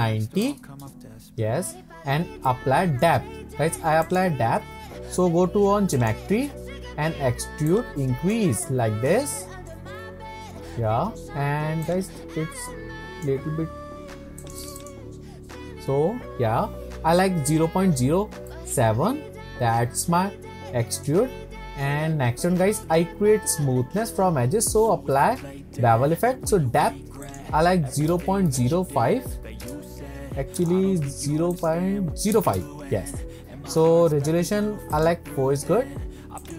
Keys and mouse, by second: 2.5-3.0 middle drag, 6.1 click, 7.8 click, 8.7-9.1 shift+middle drag, 9.3-9.7 middle drag, 12.0 click, 12.7 right click, 18.7-21.1 middle drag, 27.4-29.5 drag, 29.5-33.4 middle drag, 34.9 click.